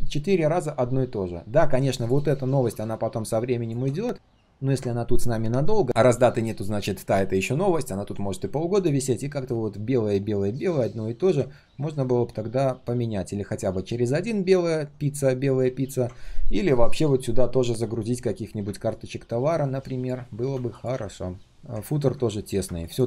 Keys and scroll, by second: 4.2 ctrl+z.